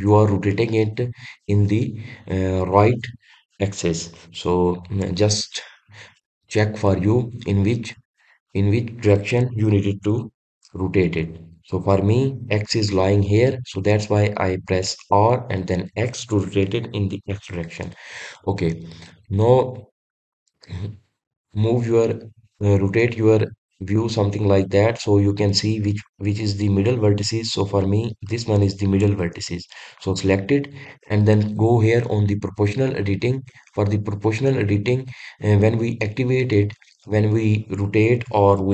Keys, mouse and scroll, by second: 19.1-22.2 middle drag, 29.0 click, 29.8-38.7 middle drag.